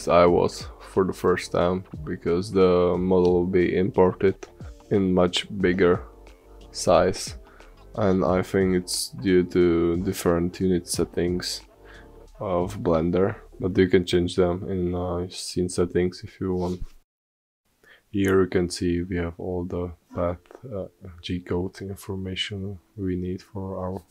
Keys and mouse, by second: 1.0-4.9 middle drag, 5.9-8.0 middle drag.